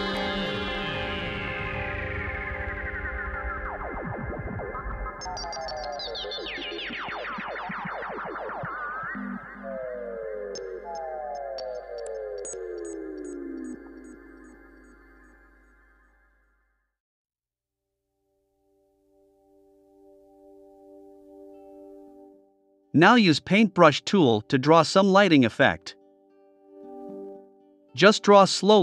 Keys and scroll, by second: 1.0 shift+c, 2.0 BackSpace, 9.4 BackSpace, 11.1 a, 14.1 BackSpace, 15.4 v.